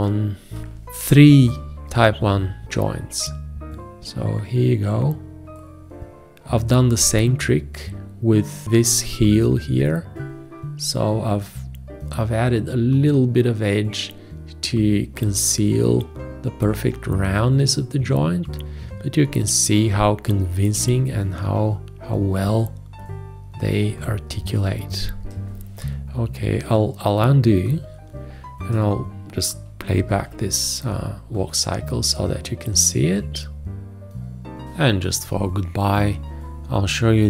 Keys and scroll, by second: 0.6 Escape, 30.1 Return.